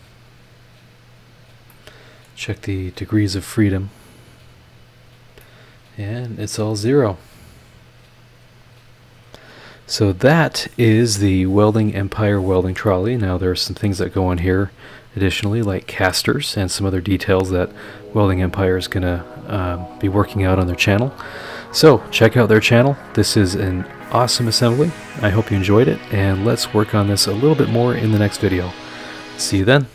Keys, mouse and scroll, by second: 1.4 click, 1.7 middle click, 3.8 click, 4.5 scroll down 2, 5.4-7.0 middle drag, 7.4 click, 8.6 click, 9.6 click, 12.8 scroll down 2, 12.9-14.6 middle drag, 14.8 scroll up 2, 23.4 scroll down 2, 24.2 scroll up 2.